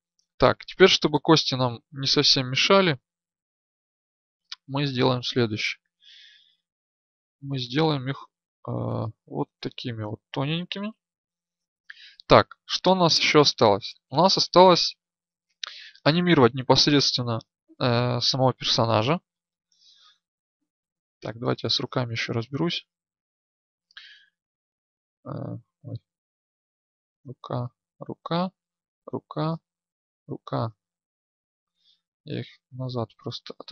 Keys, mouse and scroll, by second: 0.6-3.4 right drag, 5.3-11.5 middle drag, 5.3-7.9 scroll, 9.7 alt+scroll, 11.5 ctrl+alt+scroll, 12.7 KP_1, 24.2-27.0 right drag, 31.6-33.1 shift+middle drag.